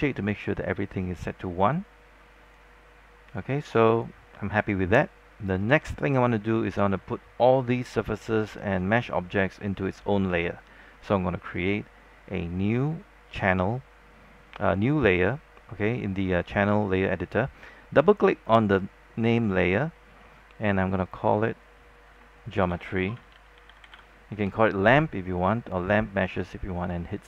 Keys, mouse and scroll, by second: 22.5-24.6 typing, 27.1-27.2 drag.